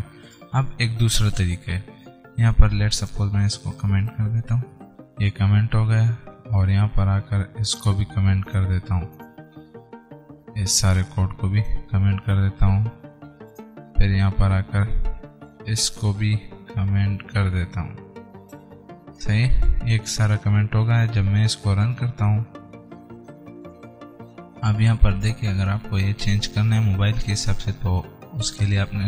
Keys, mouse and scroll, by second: 3.4-4.9 drag, 4.9 ctrl+shift+/, 5.5 scroll up 1, 7.9-12.6 drag, 12.6 ctrl+shift+/, 13.9-19.4 drag, 19.4 ctrl+shift+/, 22.1 click, 25.1 click.